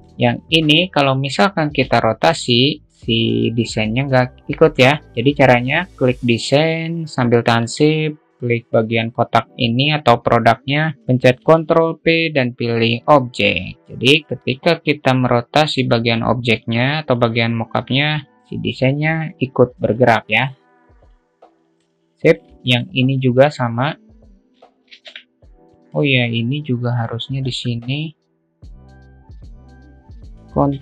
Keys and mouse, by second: 0.3-3.1 drag, 11.9 ctrl+p, 13.8-19.8 drag, 20.7 ctrl+z, 20.7-22.2 drag, 22.6-23.0 shift+middle drag, 23.0-23.5 drag, 25.4 ctrl+p, 26.3 click, 27.4-27.8 drag, 28.8 shift+click, 29.0 shift+click, 29.7 alt+z.